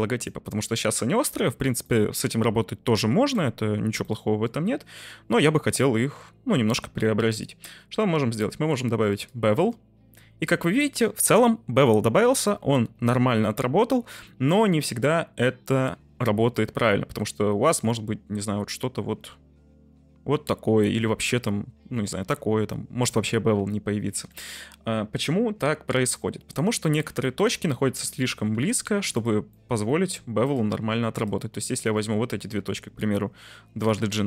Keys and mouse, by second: 0.3-0.6 middle drag, 1.8-2.2 middle drag, 4.0-4.4 middle drag, 5.7-6.2 middle drag, 7.2-9.4 drag, 10.2-11.8 middle drag, 12.5-13.1 middle drag, 17.6-23.0 shift+drag, 23.6 ctrl+z, 24.4-26.4 middle drag, 26.8 shift+middle drag, 27.2 middle drag, 27.7 Tab, 28.3 middle click, 28.5 1, 29.6 shift+middle click, 30.4 click, 33.8 g, 33.9 g.